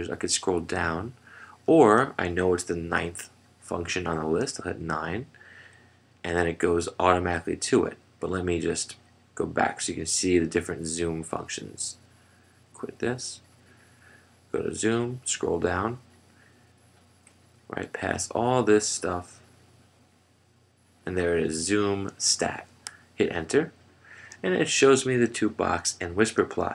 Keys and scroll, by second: 0.0 Down, 4.5 w, 13.6 F3, 15.0 Down, 23.4 Return.